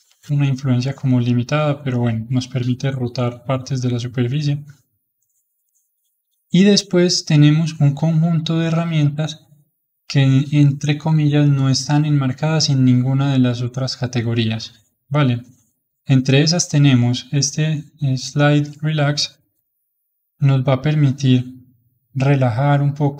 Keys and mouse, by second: 18.3-19.6 drag, 19.6-20.9 middle drag, 20.9-23.1 drag.